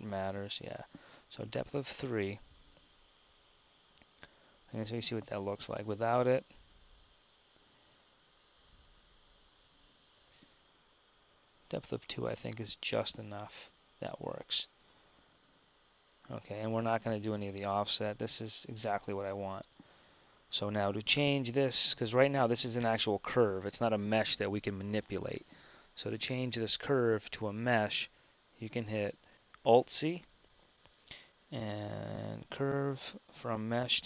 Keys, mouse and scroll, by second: 9.6-12.4 drag, 13.5-15.0 middle drag, 15.9-17.4 middle drag, 20.9 KP_1, 22.1 Tab, 27.4 KP_1, 29.3 ctrl+c, 30.0 alt+c.